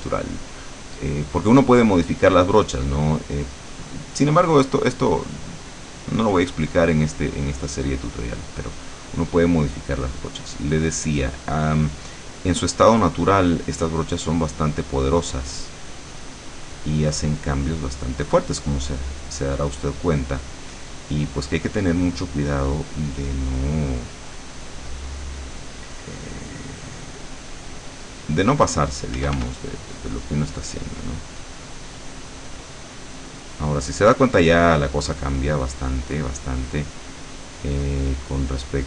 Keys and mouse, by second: 6.8-11.2 drag, 12.4-23.1 drag, 23.3-29.0 drag, 29.3 f, 29.6-37.4 drag.